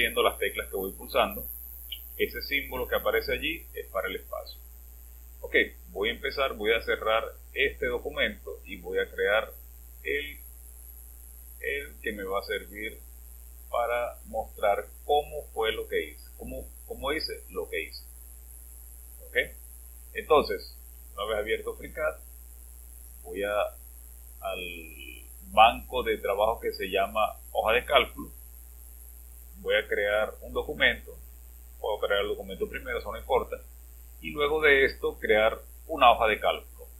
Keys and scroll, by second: 1.9 space.